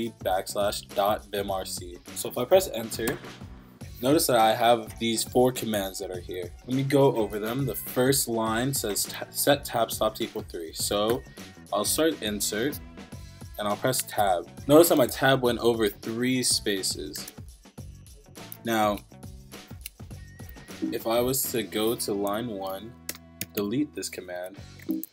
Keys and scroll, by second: 3.1 Return, 4.3 Down, 5.1 Up, 5.3 Up, 5.9 Down, 7.5 Down, 11.1 i, 14.0 Tab, 15.1 shift+v, 16.0 BackSpace, 16.3 Escape, 18.8 Escape, 19.8 Escape, 22.1 shift+;, 23.1 Return, 23.4 d, 24.4 Escape, 24.6-25.1 typing.